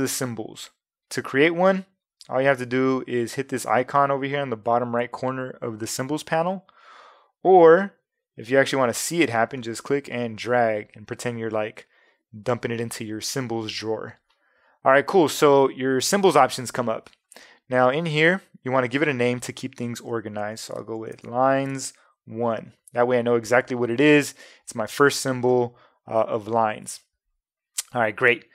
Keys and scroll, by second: 20.0-22.0 typing.